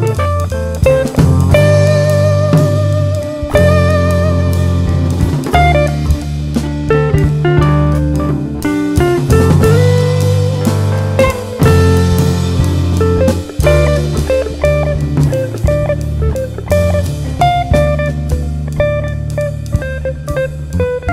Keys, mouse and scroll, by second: 0.0 alt+a, 0.3 click, 0.9 g, 1.9 click, 2.0 alt+a, 2.1 scroll down 1, 2.7 scroll up 1, 2.9 `, 4.1-4.4 scroll down 1, 4.4 scroll up 1, 4.6-5.2 scroll down 2, 5.2 Tab, 5.7 `, 6.1-6.6 scroll up 1, 6.6 `, 8.1 click, 8.3 shift+click, 9.6 click, 9.9 shift+click, 10.8 alt+m, 11.3 click, 11.8 shift+click, 12.2 shift+r, 12.5 alt+a, 13.0 Tab, 13.2-13.6 scroll down 2, 13.6 click, 14.2 2, 15.1 scroll up 1, 15.4 `, 15.7 1, 16.1 click, 16.9 scroll down 1, 17.1 `, 17.9-18.3 scroll up 1, 20.6 scroll down 1, 20.8 scroll up 1.